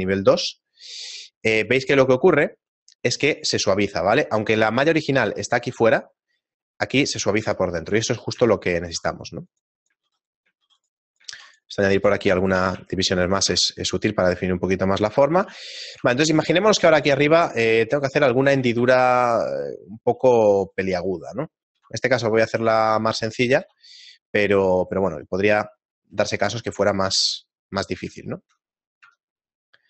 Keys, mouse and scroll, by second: 1.6 click, 2.7 click, 4.1 scroll up 2, 4.7 Tab, 4.7-5.5 scroll up 1, 5.5 right click, 7.5 Tab, 8.0-8.4 scroll down 6, 8.5 Tab, 10.7 ctrl+r, 12.7 ctrl+r, 12.7 click, 12.7 a, 13.3 shift+middle click, 13.7 Tab, 14.9 middle click, 14.9-16.0 scroll down 2, 16.0 Tab, 16.0 shift+middle click, 16.0 a, 17.0 ctrl+Tab, 17.5 right click, 17.6 shift+right click, 17.9 right click, 18.6 a, 19.1 shift+middle click, 20.2 shift+middle click, 21.0 shift+right click, 21.8 e, 22.5 s, 23.9 e, 26.2 shift+middle click, 27.6 shift+middle click, 27.6 g, 28.9 shift+middle click.